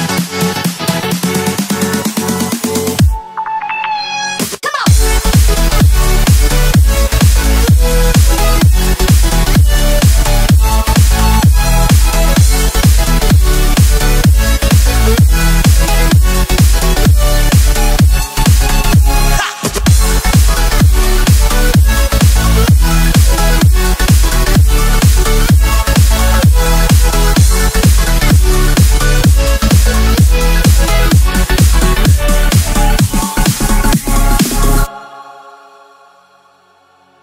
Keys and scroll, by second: 0.2 Left, 2.5 space, 3.0 super+space, 3.1 super+space, 3.1 super+space, 3.2 super+space, 3.9 space, 4.5 super+space, 8.4 space, 8.9 space, 10.5 Right, 12.9-14.2 space, 15.4-17.5 typing, 17.9 Left, 21.4 shift+super+BackSpace, 23.8 super+g, 24.4 Left, 24.8 Left, 26.0 space, 28.0 shift+super+[, 29.2 space, 29.7 alt+super+space, 29.8 alt+super+space, 29.9 alt+super+space, 30.0 alt+super+space, 30.1 alt+super+space, 30.1 alt+super+space, 32.3 super+7, 33.3 space, 33.8 alt+super+space, 33.9 alt+super+space, 34.0 alt+super+space, 34.1 alt+super+space, 34.2 alt+super+space, 34.3 alt+super+space, 34.4 typing.